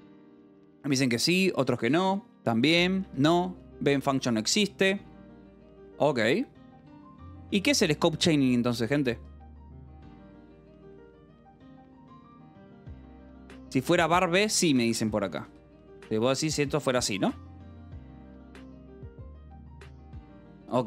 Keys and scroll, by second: 3.5 Escape, 7.0 k, 8.3 h, 8.8 v, 9.4 e, 12.9 Escape, 13.1-16.3 typing, 16.7 Escape, 18.9 u, 19.7 Escape.